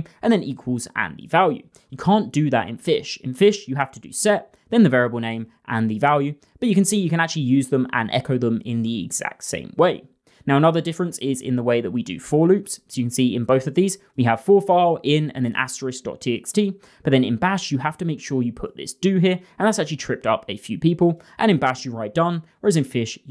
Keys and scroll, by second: 5.1-7.8 typing.